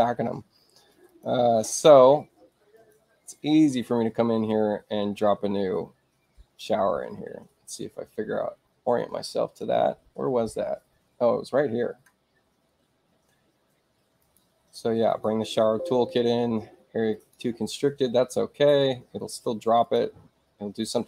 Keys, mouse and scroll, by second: 1.1 click, 2.7 click, 14.2 click, 15.0 click, 17.1 click, 19.1 space, 19.8 click.